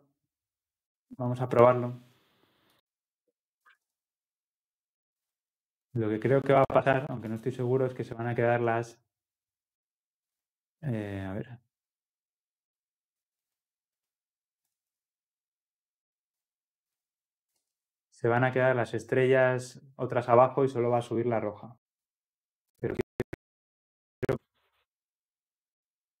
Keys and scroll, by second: 5.3 ctrl+F10, 17.6 ctrl+x, 19.4 ctrl+x, 19.5 shift+F10.